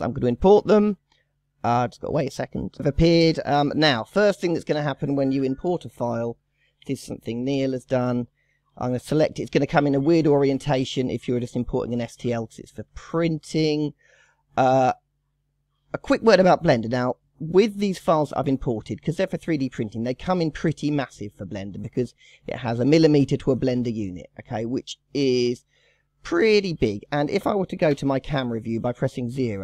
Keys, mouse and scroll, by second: 3.1-3.9 scroll down 16, 4.0 scroll up 1, 4.1 scroll down 1, 4.4-5.3 middle drag, 5.3 KP_1, 6.8 KP_3, 7.5-8.4 drag, 9.4 middle click, 9.9-10.2 scroll up 4, 10.2-11.6 middle drag, 11.6 scroll down 1, 11.7 scroll up 1, 12.0-12.6 scroll down 2, 12.6-12.9 shift+middle drag, 12.9 scroll up 3, 13.6-14.1 scroll down 5, 14.1 middle click, 14.3 scroll down 1, 14.5-16.2 scroll up 2, 16.2-18.0 scroll up 10, 18.0-18.7 scroll down 3, 18.7-20.6 middle drag, 20.6-21.8 scroll up 10, 21.8-23.1 scroll down 10, 23.1-23.6 middle drag, 23.6 scroll up 1, 23.8-24.1 scroll down 5, 24.1-24.6 shift+middle drag, 24.6 scroll up 4, 24.9-27.9 middle drag, 27.9 KP_0, 28.7-29.1 scroll down 5, 29.1-29.6 scroll up 7.